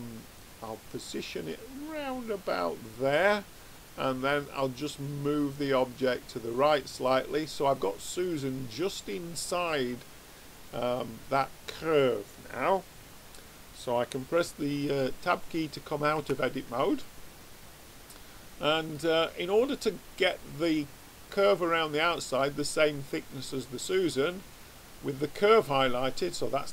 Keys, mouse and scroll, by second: 4.3 click, 9.1-11.1 middle drag, 16.1 Tab.